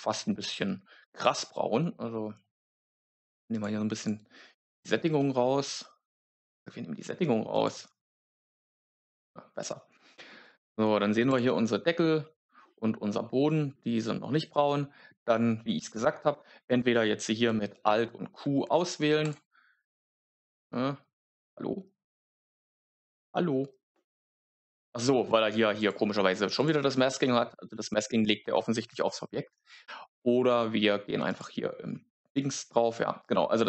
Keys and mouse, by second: 3.4 click, 3.9 click, 4.7 click, 7.4 click, 10.0 shift+middle click, 11.2 click, 18.1 alt+q, 22.5 click, 25.7 click, 27.8 middle click, 31.2 click, 33.4 click.